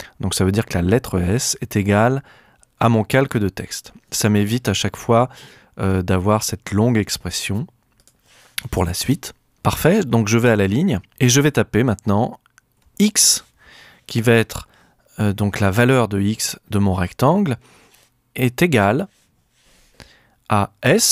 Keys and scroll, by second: 10.5 Return, 12.7 x, 18.8 =, 20.8 s.